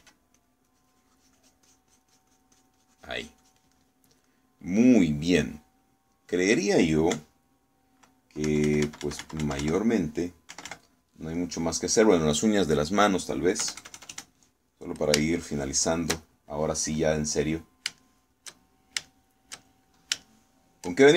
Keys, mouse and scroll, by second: 1.0 f, 1.4-4.8 drag, 7.0 middle click, 8.2 KP_Subtract, 11.6 KP_Subtract, 12.4-13.6 middle drag, 14.7 KP_Add, 16.3-17.9 shift+middle drag, 18.2-21.1 middle drag.